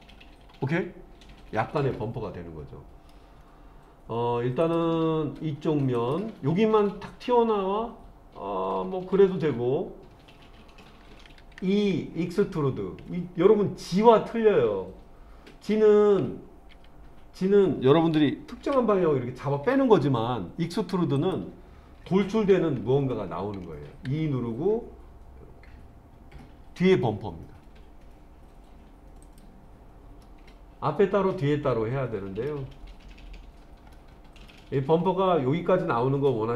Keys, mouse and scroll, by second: 4.6 click, 6.0 click, 16.7 g, 18.6 y, 21.2 click, 22.3 ctrl+z, 24.1 e, 29.3 click, 30.2-32.5 middle drag, 34.0 middle click.